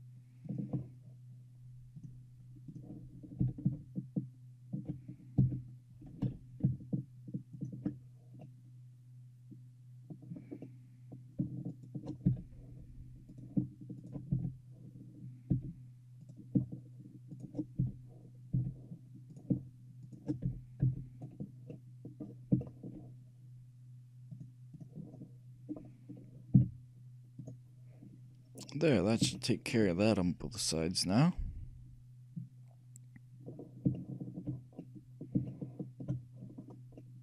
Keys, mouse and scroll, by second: 2.1-3.9 drag, 3.5 g, 8.5-10.3 middle drag, 10.5-15.9 middle drag, 11.8 shift+click, 12.4 f, 14.5 f, 15.7 f, 16.3-19.1 drag, 17.9 f, 18.7 f, 19.1 right click, 19.5-21.3 shift+right drag, 20.6 f, 20.9 f, 21.3 middle click, 21.9-22.2 scroll down 1, 22.2-22.5 scroll up 1, 22.5 scroll down 1, 22.7-24.5 shift+middle drag, 24.5-26.1 shift+drag, 26.1-28.0 middle drag, 26.7 z, 28.0 scroll up 1, 28.1-32.1 middle drag, 33.7-37.2 middle drag.